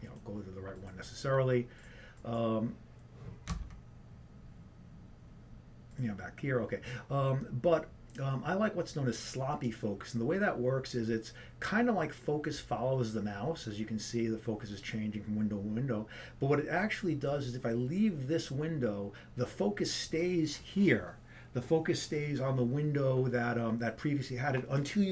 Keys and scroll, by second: 4.8 alt+Tab.